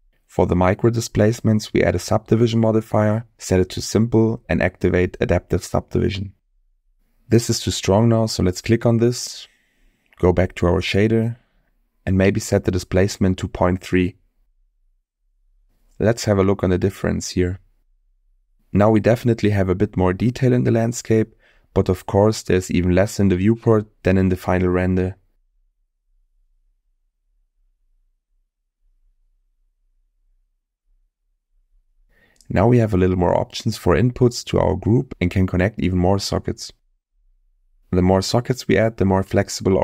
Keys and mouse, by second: 3.7 click, 4.7 click, 7.8 middle click, 9.1 click, 10.5 middle click, 12.8-14.3 drag, 16.9 click, 17.7 click, 19.6-20.2 middle drag, 21.1 middle click, 21.9-22.9 middle drag, 25.3 click, 25.7 click, 26.7-27.2 middle drag, 27.9-28.4 middle drag, 30.2 click, 31.0 middle click.